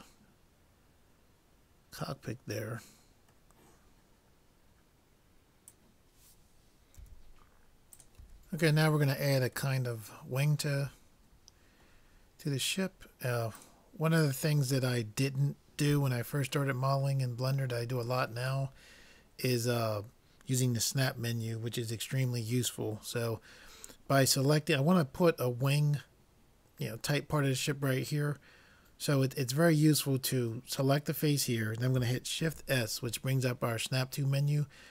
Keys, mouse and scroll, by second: 0.2 middle click, 8.2 n, 9.8-11.5 middle drag, 13.7-16.4 drag, 16.8-18.5 middle drag, 32.4 shift+s.